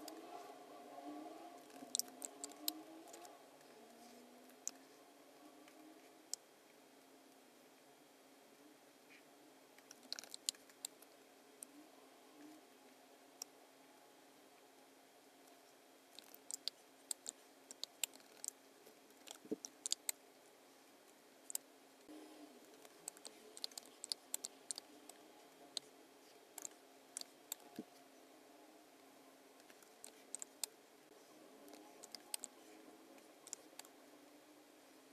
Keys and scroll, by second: 1.7 super+-, 2.5 space, 10.2 super+=, 10.5 space, 16.2 super+-, 16.7 space, 17.8 space, 18.1 super+=, 19.9 space, 22.8 space, 23.6 space, 24.1 space, 24.8 space, 27.2 space, 27.8 v, 30.4 space, 32.1 space, 33.5 space.